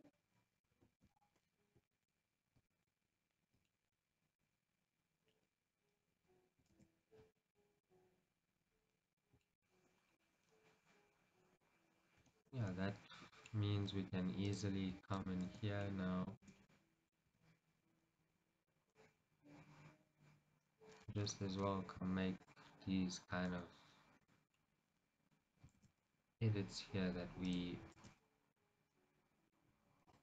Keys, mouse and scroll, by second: 7.9-9.6 middle drag, 9.9 scroll, 10.4-12.5 middle drag, 11.8 scroll, 12.3 Tab, 12.5 click, 13.0 Tab, 13.4-14.6 shift+middle drag, 13.7-14.6 scroll up 2, 14.6-15.6 drag, 15.6 shift+z, 16.0-24.3 middle drag, 16.6 shift+z, 17.6 g, 23.9 z, 24.3 click, 24.6-30.2 middle drag, 25.9 shift+z, 27.6 click, 28.0 shift+z.